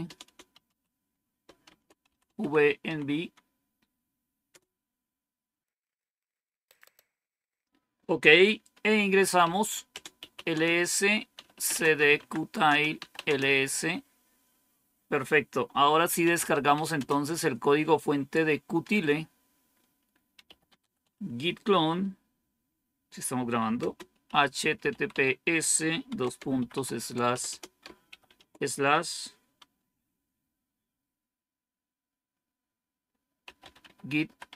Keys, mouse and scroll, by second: 0.0-4.9 typing, 9.3-13.2 typing, 15.9-17.1 typing, 20.0-21.4 typing, 23.7-28.5 typing, 33.1-34.5 typing.